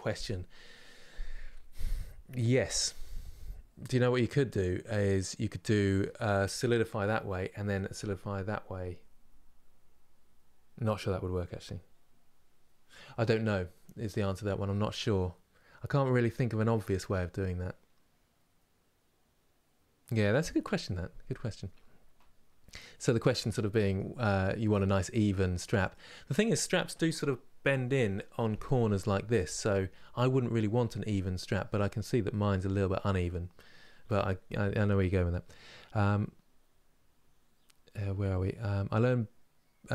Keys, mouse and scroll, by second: 31.8-39.9 scroll up 1.